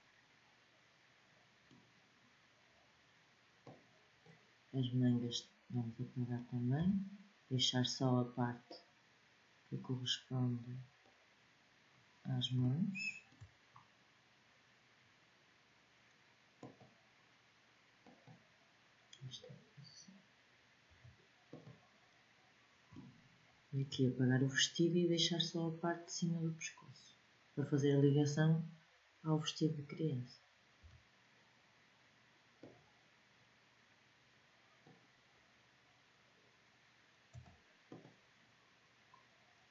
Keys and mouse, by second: 3.3-6.4 drag, 6.4 b, 11.6 middle click, 13.5-14.7 middle drag, 16.3-20.6 drag, 20.6 Delete, 30.4 b, 37.0 Delete.